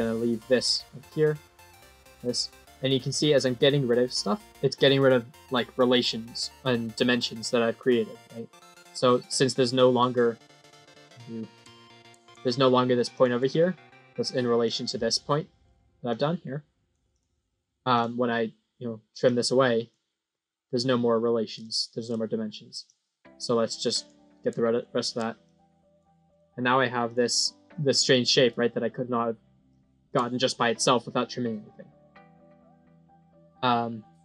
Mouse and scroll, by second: 1.2-1.6 drag, 2.0 scroll up 2, 2.6 middle click, 3.1 scroll up 1, 13.0 click, 14.5 click, 16.0-16.8 drag, 17.0 click, 17.9 click, 18.3-18.7 scroll up 9, 19.1-19.8 drag, 20.2-20.6 scroll up 2, 21.6 middle click, 22.7-24.0 drag, 24.7 middle click, 25.4-25.9 drag, 26.2 right click, 26.9 click, 28.0 middle click, 28.4 scroll down 4, 29.6 middle click.